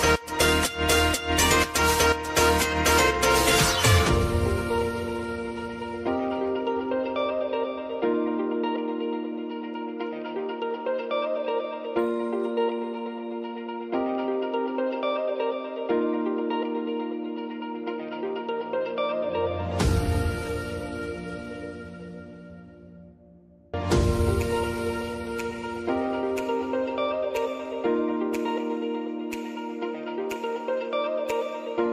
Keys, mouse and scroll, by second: 0.7 click, 2.0 Return, 3.2 click, 4.4 F9, 5.3-9.3 drag, 9.3-10.8 drag, 11.2 space, 13.2 shift+click, 13.9 [, 14.4 space, 16.3 click, 18.1 space, 22.3 click, 22.5 space, 23.5 click, 23.8 space, 26.8 space, 27.3-31.9 drag.